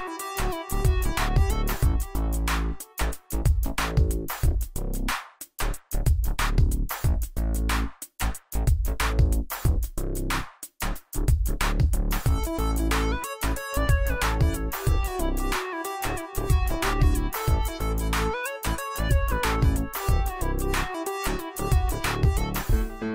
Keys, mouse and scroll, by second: 5.0 shift+click, 5.8 right click, 7.3-22.7 drag.